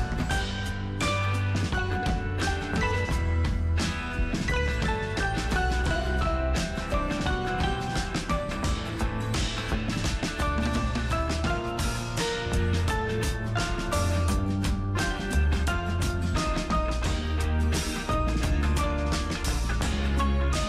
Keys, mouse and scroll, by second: 0.3 ctrl+alt+shift+super+t, 2.9 ctrl+alt+shift+super+t, 3.1 alt+super+scroll up 1, 4.2 alt+super+scroll down 1, 6.9 alt+super+scroll up 1, 9.1 super+Return, 9.4 super+click, 11.0 alt+super+scroll down 1, 11.7 alt+super+scroll up 1.